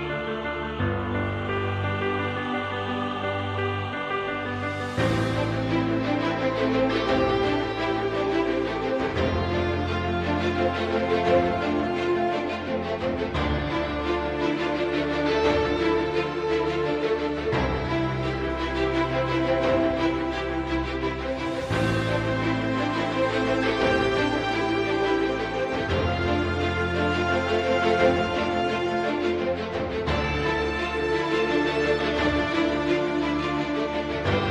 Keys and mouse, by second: 0.1 shift+click, 0.8 shift+click, 1.8 KP_7, 3.5 shift+middle click, 6.0 e, 13.4 middle click, 14.6 middle click, 16.8 click, 17.6 click, 18.4 click, 19.6 KP_7, 21.5 g, 26.3 s, 31.3-32.3 middle drag, 33.0-34.5 middle drag.